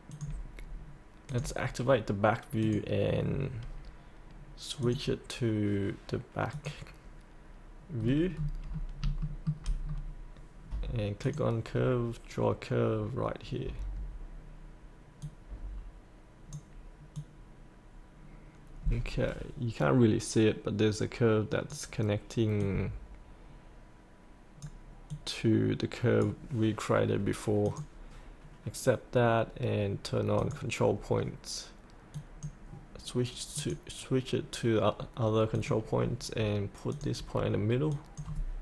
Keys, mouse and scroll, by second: 0.1 click, 8.0-8.7 scroll down 2, 9.2 shift+middle click, 9.8-11.2 scroll down 1, 11.2-33.4 drag.